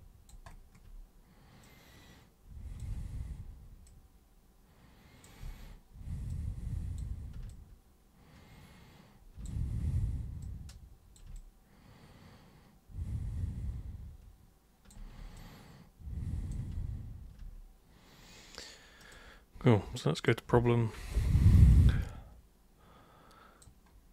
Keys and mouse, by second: 1.6-2.8 super+drag, 2.9 super+e, 3.9-5.2 super+drag, 5.4 super+w, 6.3 super+click, 7.5-9.4 alt+super+drag, 9.7 super+e, 10.4 super+click, 11.3-14.9 alt+super+drag, 15.3-16.5 alt+super+drag, 19.0 super+click, 20.1 super+click, 21.1-23.6 alt+super+drag.